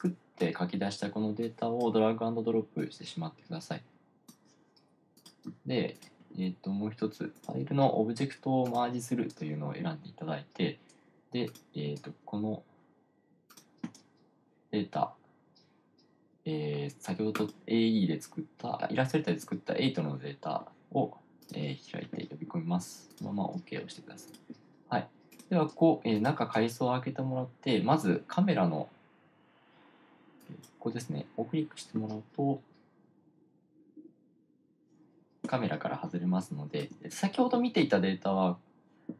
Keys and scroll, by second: 36.7 1, 37.3 1.